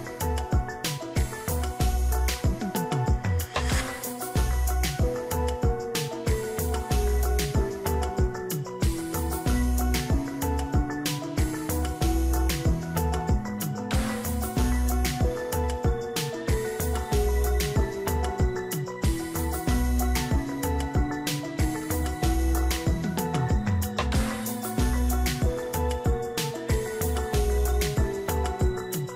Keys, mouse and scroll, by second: 18.8 ctrl+d, 21.2 ctrl+click, 25.7 double click.